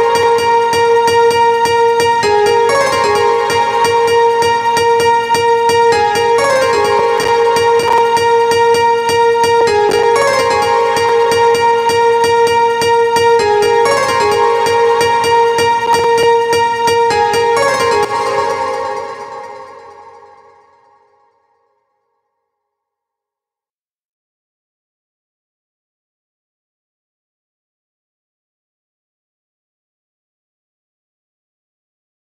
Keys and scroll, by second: 17.5 space.